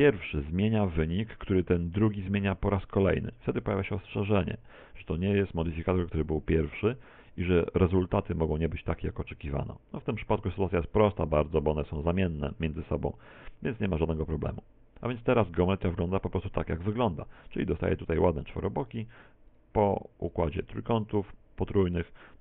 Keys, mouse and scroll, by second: 7.7 click, 17.9 click, 19.0 Tab, 19.7-20.7 scroll up 4, 21.1 right click, 21.5-22.4 right click.